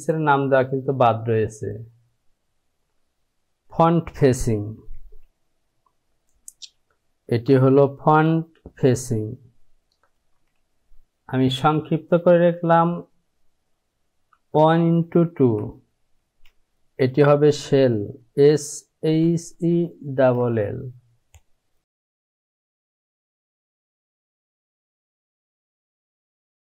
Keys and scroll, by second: 7.3 r, 7.8 space, 10.2 f, 11.5 space, 14.8 KP_1, 14.8 x, 15.4 KP_2, 16.2 space, 18.3-20.5 typing, 22.1-26.6 typing.